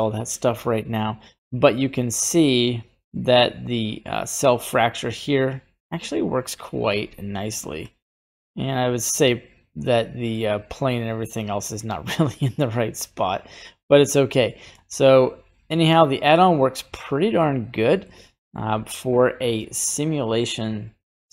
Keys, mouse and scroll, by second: 2.2-7.8 drag, 8.2-10.4 middle drag, 10.7 right click, 11.4 right click, 15.1-16.4 drag, 16.7-17.1 scroll down 2, 16.9 middle click, 18.0-21.3 middle drag.